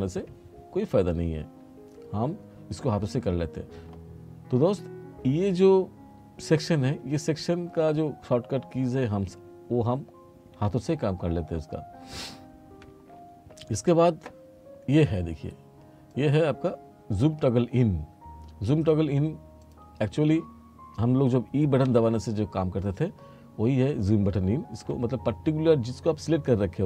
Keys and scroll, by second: 24.9 e.